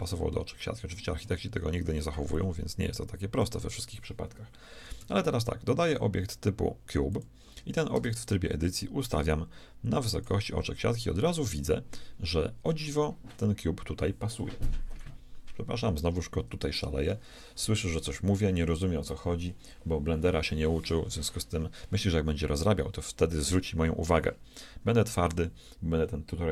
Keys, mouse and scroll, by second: 2.3-4.2 drag, 5.0 shift+a, 7.9 Tab, 9.1-10.9 drag, 10.9-15.5 middle drag.